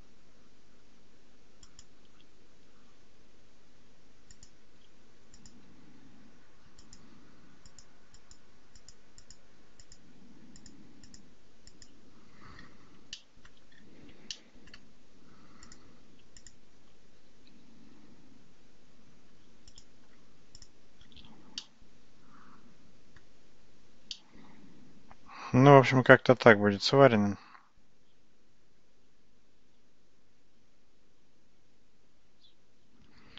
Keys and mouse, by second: 4.3 click, 5.5 click, 6.8 click, 7.8 click, 8.3 click, 8.8 click, 9.3 click, 11.7 click, 13.2 shift+middle click, 13.5 shift+click, 14.4 shift+click, 15.7 click, 16.5 shift+click, 17.5 g, 21.6-23.3 middle drag, 24.2-33.3 middle drag.